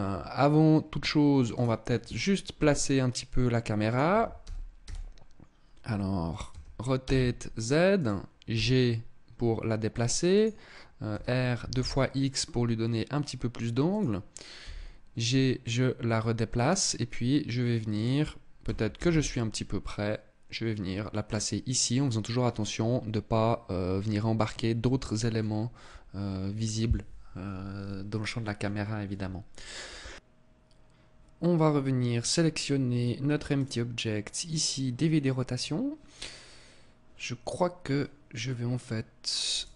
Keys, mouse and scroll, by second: 1.0 right click, 2.1 g, 3.5 click, 3.6 r, 6.0 r, 7.5 click, 8.0 g, 9.9 click, 10.6 r, 13.5 click, 14.1 g, 18.1 click, 18.1 g, 20.9 click, 33.0 click, 39.0 right click.